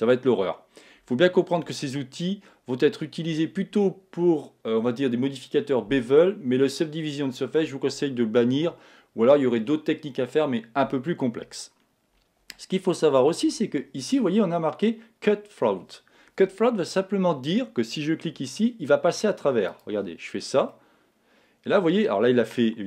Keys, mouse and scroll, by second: 19.7 click, 20.7-22.6 middle drag.